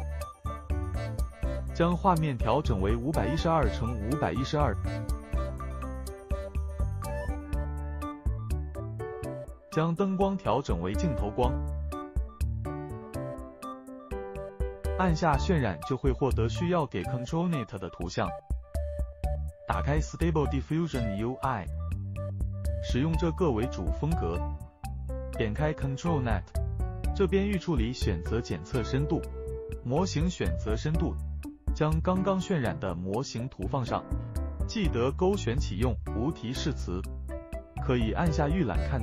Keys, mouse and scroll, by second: 3.0 click, 9.5 click, 10.6 click, 10.8-12.0 click, 12.6 click, 13.1 click, 13.9 click, 15.1 click, 16.4 click.